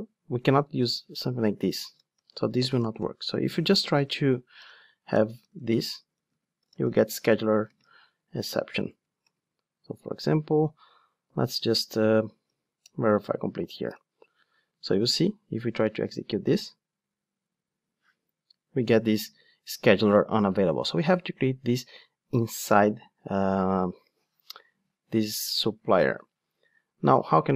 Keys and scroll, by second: 0.8 super+c, 3.9 super+v, 12.8 Return, 14.9 ctrl+shift+d.